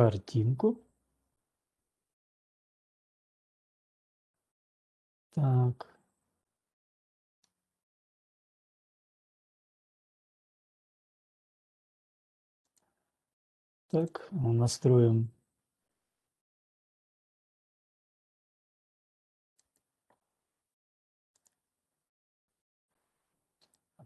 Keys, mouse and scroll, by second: 0.2-4.6 middle drag, 7.6-9.9 middle drag, 10.2 middle click, 10.5-12.9 middle drag, 10.5 typing, 12.9 click, 14.8 click, 20.2 click, 20.6 click, 21.7 click, 22.8 click, 23.7 click.